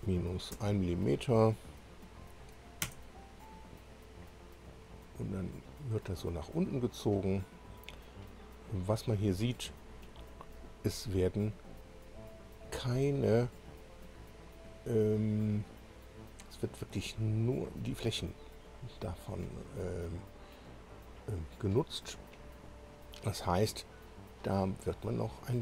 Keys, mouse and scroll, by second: 0.5 1, 2.8 Return, 5.1-5.4 scroll up 1, 5.9-9.5 drag, 12.2-15.3 drag, 15.8-16.3 scroll down 2, 16.5-20.7 drag.